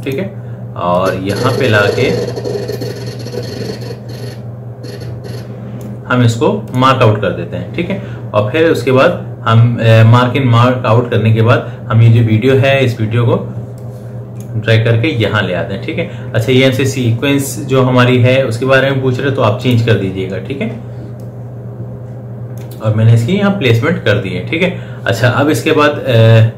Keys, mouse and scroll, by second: 14.1-17.3 drag, 19.9-25.6 drag.